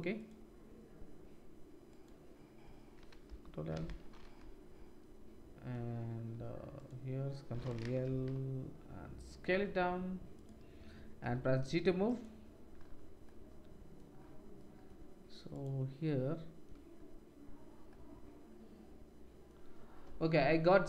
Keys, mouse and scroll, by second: 2.0 middle click, 4.5 click, 5.2-20.8 drag, 6.7 middle click, 6.7 right click, 15.5 right click.